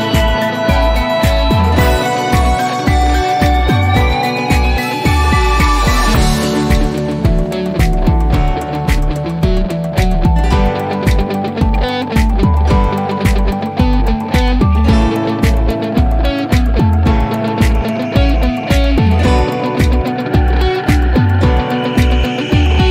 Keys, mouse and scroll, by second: 2.5 z, 3.0-3.4 scroll down 1, 4.6-7.4 drag, 10.1-10.6 scroll down 1, 12.4 click, 12.9 scroll down 1, 14.7 click, 17.3 click, 19.2-21.9 drag.